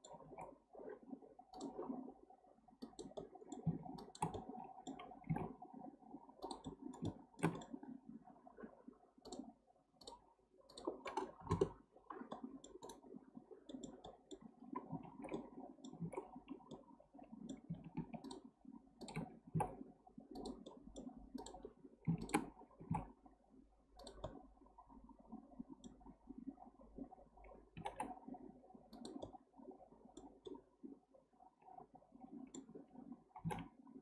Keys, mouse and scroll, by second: 0.2 alt+z, 1.6 click, 2.8 click, 3.2 middle click, 4.0 shift+click, 4.3 middle click, 5.2 g, 6.6-7.0 middle drag, 7.0-8.2 scroll up 2, 8.2-9.2 scroll down 1, 9.2 click, 10.0-12.3 drag, 12.3 middle click, 12.8-13.7 right drag, 13.7-14.5 middle drag, 14.5-15.1 scroll up 2, 15.1 alt+z, 15.3-16.0 middle drag, 16.0 alt+z, 16.7-18.2 middle drag, 18.2 shift+click, 19.0 shift+drag, 19.4 g, 20.7 middle click, 21.4 click, 22.2 shift+click, 22.8 g, 24.2-27.3 middle drag, 29.2-33.4 middle drag, 33.4 g.